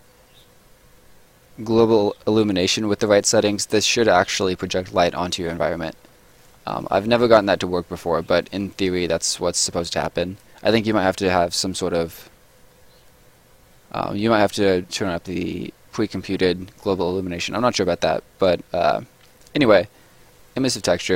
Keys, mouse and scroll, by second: 5.7 scroll up 1, 6.3 right click, 6.6 scroll down 1, 6.8 middle click, 7.1 scroll up 1, 7.3 middle click, 9.2 scroll down 1, 9.6 right click, 17.0 scroll up 1, 17.6 middle click, 18.3 click, 19.3-20.8 scroll down 1, 21.0 scroll up 1.